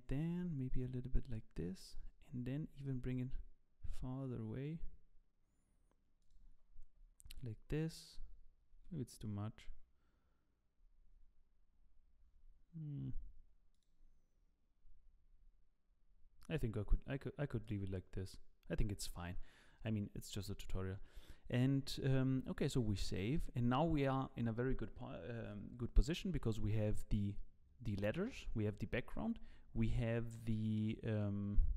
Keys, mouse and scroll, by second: 0.3 g, 2.1-3.0 scroll down 1, 3.0 scroll down 8, 3.0 g, 6.5-8.7 scroll up 1, 8.7 scroll up 6, 8.7 g, 20.3 scroll up 2, 22.9 ctrl+s.